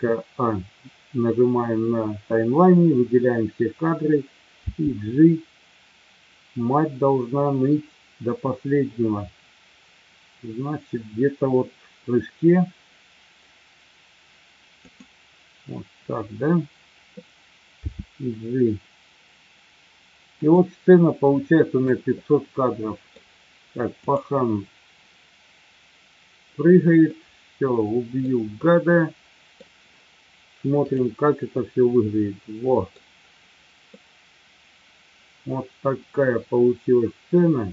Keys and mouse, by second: 4.7 g, 17.8 g, 22.2-23.2 middle drag, 25.8-27.7 drag, 27.7 middle click, 28.7-29.7 middle drag, 30.8 click, 31.6-33.0 middle drag, 33.9-37.7 middle drag.